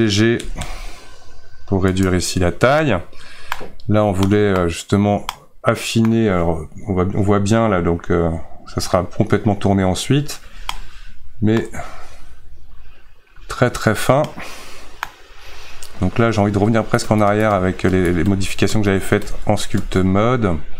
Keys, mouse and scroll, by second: 0.4 g, 2.8-16.5 middle drag, 16.5 ctrl+z, 18.7 ctrl+z.